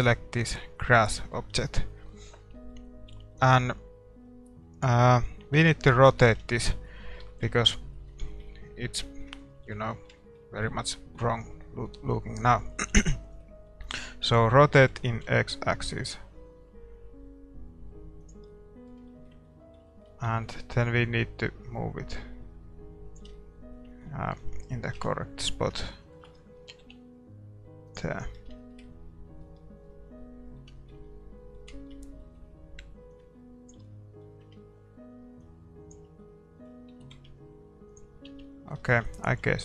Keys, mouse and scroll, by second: 1.0-15.2 middle drag, 4.7-6.8 right drag, 5.6 Tab, 6.4 a, 14.9 r, 18.4-19.8 middle drag, 21.0-22.8 drag, 23.3-24.9 middle drag, 24.9 KP_7, 25.0 middle click, 26.8 g, 27.5-28.1 scroll up 1, 28.1-35.5 middle drag, 33.3-37.1 drag, 36.2-38.1 middle drag, 37.0 r, 38.1 scroll down 1, 38.3 Tab, 38.4-39.6 middle drag, 39.3 a.